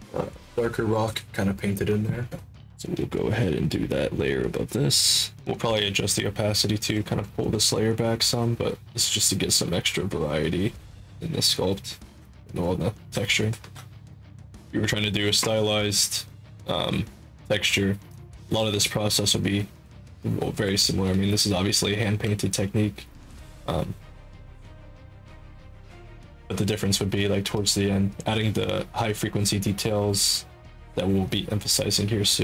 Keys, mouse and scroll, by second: 3.6 click, 4.4 click, 5.2 click, 5.8 click, 6.0 click, 6.3 click, 6.4 click, 6.6 click, 6.8 click, 7.1 click, 7.2 click, 7.4 click, 7.6 click, 7.8 click, 8.0 click, 8.3 click, 8.6 click, 9.4 click, 9.6 click, 9.8 click, 10.0 click, 10.2 click, 11.2 ctrl+alt+click, 11.8 ctrl+alt+click, 12.2 alt+click, 12.7 ctrl+alt+click, 13.1 alt+click, 13.6 ctrl+alt+click, 14.5 ctrl+alt+click, 15.8 click, 17.7 click, 17.9 click, 19.0 alt+click, 19.4 ctrl+alt+click, 20.2 click, 21.1 ctrl+z, 21.4 click, 22.0 ctrl+z, 22.4 alt+click, 23.0 ctrl+alt+click, 23.6 click, 24.3 click, 27.6 click, 28.9 click, 29.7 click, 31.8 alt+click.